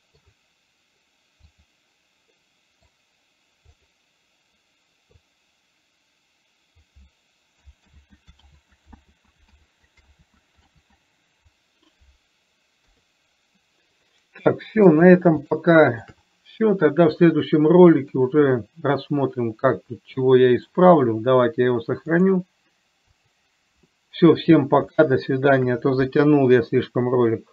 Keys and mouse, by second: 2.8 middle click, 4.1 click, 5.6-7.1 drag, 8.3 ctrl+z, 8.9 ctrl+z, 10.0 ctrl+z, 11.1 ctrl+z, 13.1 KP_3, 14.5-15.1 middle drag, 15.9-16.3 shift+middle drag, 18.5-21.0 middle drag, 22.6-23.8 drag, 25.3 shift+middle click.